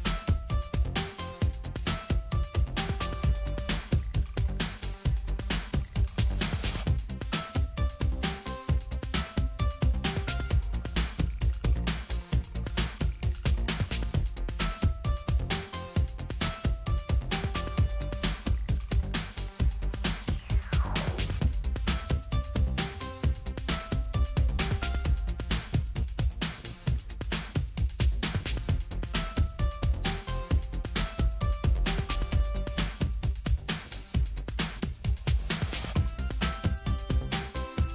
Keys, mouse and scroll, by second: 0.2 ctrl+z, 2.8 click, 4.1 right click, 5.2 click, 7.4 click, 9.2 Delete, 11.8-12.6 ctrl+scroll up 2, 13.1-13.6 ctrl+scroll up 2, 14.8 click, 16.3 click, 18.0 Delete, 18.4-19.0 scroll down 2, 19.4 click, 20.0 Delete, 20.8-21.4 scroll up 1, 22.5 click, 23.0 Delete, 24.1-25.3 ctrl+scroll down 1, 26.4-26.9 ctrl+scroll up 1, 26.9-27.4 ctrl+scroll down 1, 28.6-29.0 ctrl+scroll down 2, 29.2-29.7 ctrl+scroll up 2, 33.2 click, 33.9 click, 35.3 right click, 37.1 click.